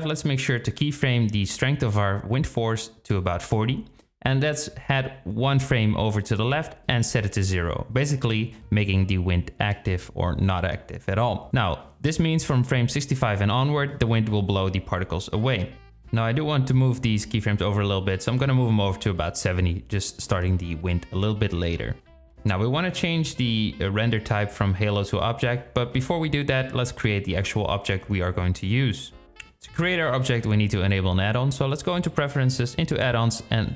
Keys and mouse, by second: 0.8 i, 1.8 click, 3.1-6.4 drag, 5.3 KP_Decimal, 6.4 i, 7.9-8.7 drag, 8.2 space, 12.4 space, 14.8-15.2 drag, 15.4-16.8 drag, 17.8 click, 18.3 space, 29.5-30.6 drag.